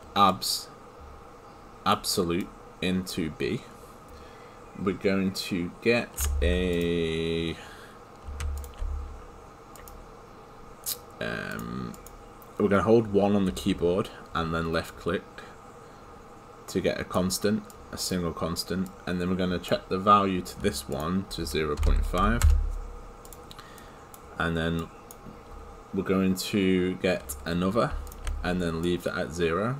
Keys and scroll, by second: 23.8 Return.